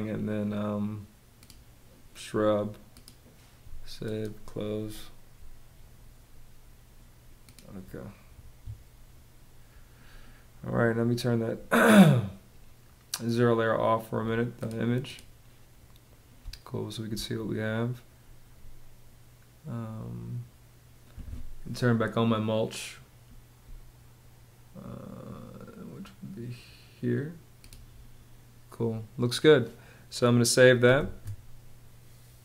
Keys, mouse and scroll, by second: 8.0 Escape, 16.0 space, 30.6 super+s.